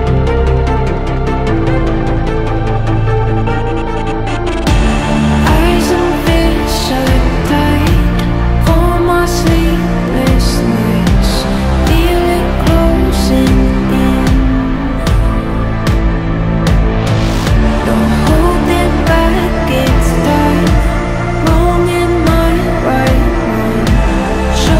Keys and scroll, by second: 17.3 Delete, 22.9 F3, 23.2 Escape, 23.4 F3, 23.5 Escape.